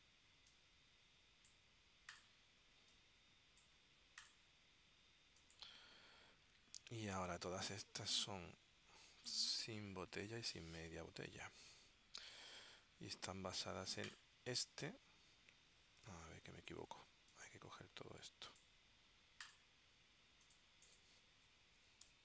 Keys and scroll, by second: 16.8 super+z, 22.0-22.2 typing.